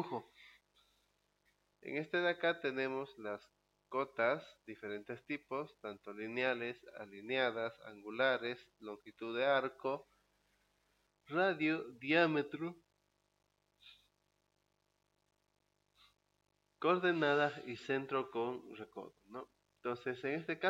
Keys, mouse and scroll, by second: 4.6 click.